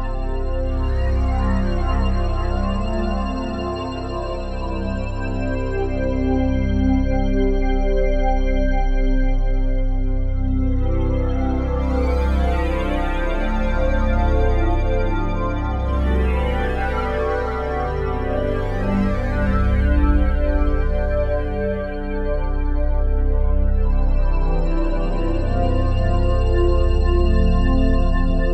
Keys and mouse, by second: 0.3 click, 0.8-2.2 middle drag, 1.7 ctrl+z, 2.1 click, 2.6 space, 3.1-3.5 space, 3.6 space, 4.0-7.8 drag, 7.8 ctrl+c, 8.9 click, 9.1 click, 10.2-11.5 drag, 12.1 ctrl+v, 13.0 Return, 14.0-14.6 drag, 15.1-16.5 alt+shift+drag, 18.2 super+d, 18.5-21.8 drag, 21.8 ctrl+c, 21.9 click, 22.5 click, 24.2-25.8 drag, 25.7 ctrl+v, 26.5 Return, 27.3 click, 28.2 ctrl+s.